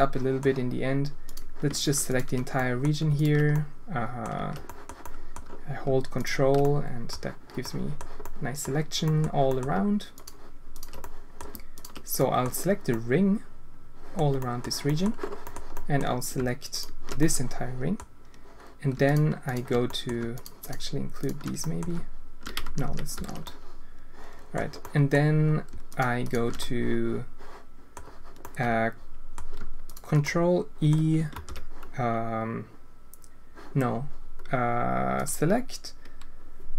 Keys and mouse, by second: 1.2 click, 2.1 ctrl+click, 2.7 click, 3.6 click, 4.7 click, 5.1 click, 6.1 ctrl+click, 6.7 click, 7.6 click, 8.3 click, 9.1 click, 9.5 click, 11.0 click, 11.7 ctrl+click, 12.2 click, 13.0-14.1 middle drag, 14.5 middle click, 14.8 middle click, 15.8 middle click, 17.1 click, 19.0 shift+click, 19.8 click, 20.6 shift+click, 21.6 click, 22.6 ctrl+z, 22.8 ctrl+z, 23.3 ctrl+z, 23.4-24.5 drag, 24.8 click, 25.8 shift+click, 26.5-27.9 drag, 28.4 click, 30.2 click, 31.3 ctrl+e, 35.1-36.7 drag.